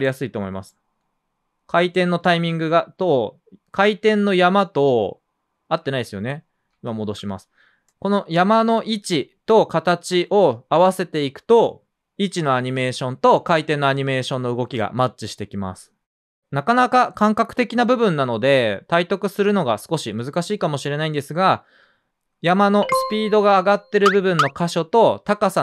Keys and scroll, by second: 2.3 space, 6.7 super+z, 11.0 space, 14.3 space, 15.3 space.